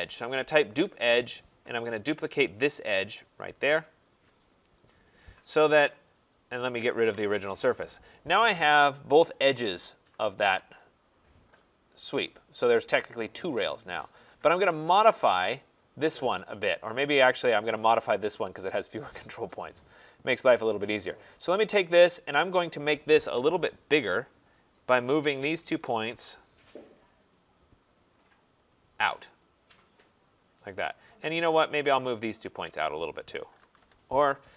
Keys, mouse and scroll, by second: 0.0-0.1 typing, 0.7 Return, 2.7 click, 4.0 Return, 5.1 click, 6.1 click, 7.0 Delete, 7.9 middle click, 7.9 middle click, 8.1 middle click, 12.6 right click, 13.1 scroll, 14.8 click, 17.3 click, 18.7 click, 20.8 click, 22.8 click, 25.0 shift+click, 25.6-26.5 typing, 25.8 shift+click, 27.0 click, 28.7 click, 29.6 typing, 30.7 right click, 31.8 click, 32.5 shift+click, 33.2-34.1 typing.